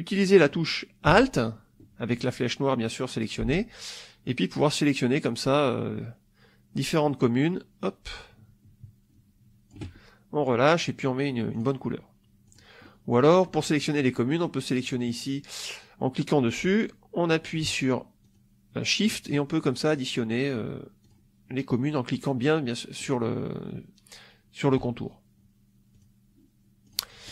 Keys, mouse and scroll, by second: 3.7-9.8 alt+drag, 11.4 click, 12.4 click, 12.7 middle click, 13.4 middle click, 14.7 click, 18.1 shift+click, 19.7 shift+click, 20.9 shift+click, 23.0 shift+click, 25.8 click, 26.7 click.